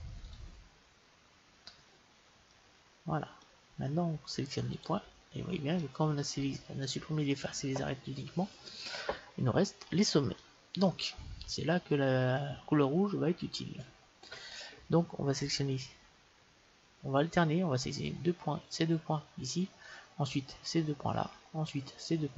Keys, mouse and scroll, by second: 1.4-4.5 middle drag, 4.7-6.8 drag, 5.8-7.7 middle drag, 11.3-18.3 middle drag.